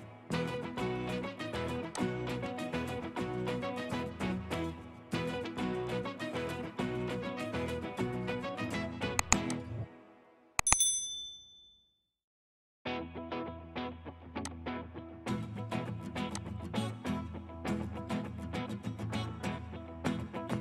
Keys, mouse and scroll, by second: 5.9 scroll down 1, 6.1 middle click, 6.9 scroll down 1, 7.2 middle click.